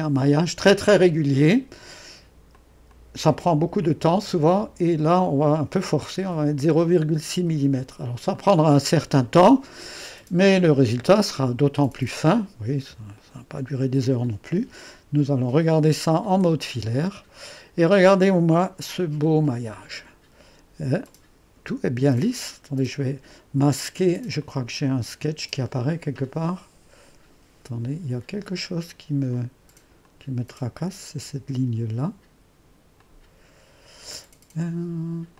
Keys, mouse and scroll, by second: 2.5-8.1 drag, 8.3-9.7 drag, 13.2-16.3 middle drag, 16.3 &, 19.2-20.3 drag, 20.3-21.7 scroll up 1, 21.7-23.7 drag, 24.4-25.6 drag, 25.7-27.8 drag, 29.3-34.3 drag.